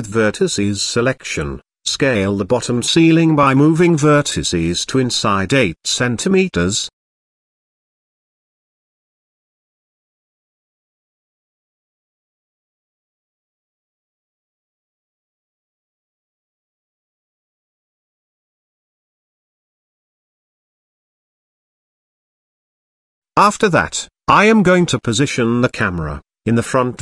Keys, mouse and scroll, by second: 0.0 KP_7, 2.3-3.0 middle drag, 3.8 g, 8.3 click, 9.3 shift+drag, 9.8 middle click, 10.9 g, 14.4 click, 15.5 shift+click, 16.4 g, 18.0-19.5 middle drag, 20.1-20.5 shift+middle drag, 21.1 Tab, 21.9 Tab, 22.7-23.8 middle drag, 25.0 KP_1, 26.0 middle click.